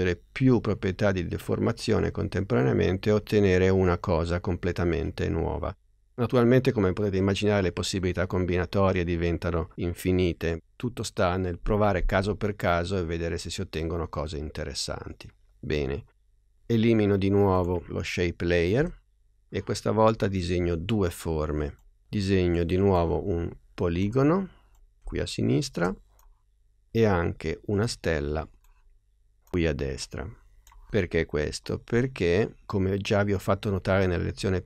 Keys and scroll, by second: 18.8 BackSpace.